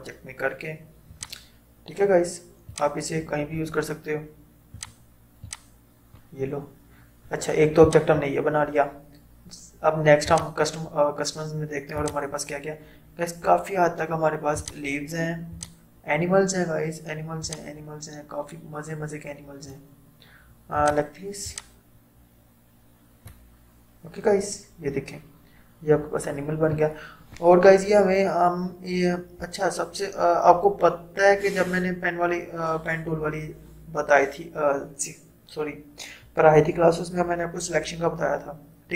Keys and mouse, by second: 1.1-7.9 drag, 10.3-25.7 drag.